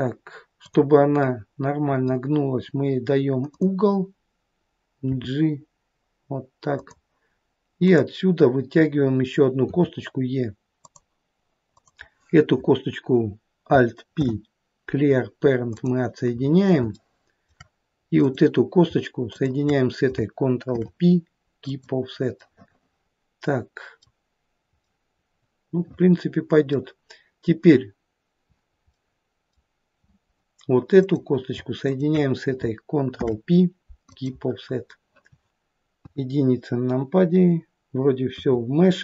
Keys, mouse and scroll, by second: 0.6 click, 1.3 middle click, 3.5 click, 5.2 g, 7.9 click, 9.7 e, 11.7 click, 14.2 alt+p, 16.5 scroll up 3, 17.0 shift+middle click, 18.2 click, 19.4 shift+click, 20.7 ctrl+p, 24.1-24.9 scroll down 2, 24.9 middle click, 29.0 middle click, 29.2 middle click, 31.0 click, 31.9 shift+click, 33.1 ctrl+p, 34.7-35.0 scroll down 2, 36.0 KP_1, 38.3 KP_3.